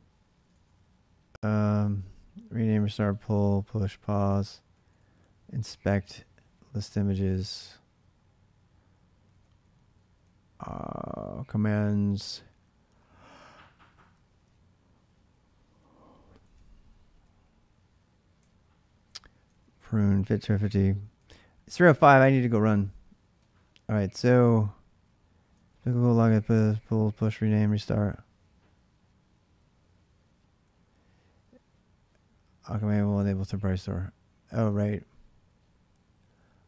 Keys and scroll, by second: 0.3-3.2 typing, 4.7 k, 5.0 k, 5.2-6.6 k, 8.7-13.2 typing, 15.7-18.6 typing, 20.9-24.8 typing, 26.5 j, 26.8 j, 27.5 j, 36.0-36.6 typing.